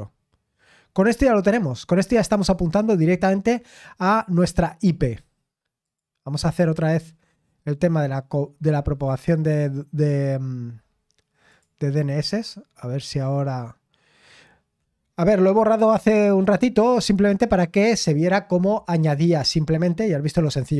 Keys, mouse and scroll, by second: 5.8 click, 6.7-7.3 scroll down 1, 7.3-8.2 scroll up 2, 8.9-9.4 scroll down 2, 9.4-11.4 scroll up 2, 11.5 click, 11.7 click, 19.3 click.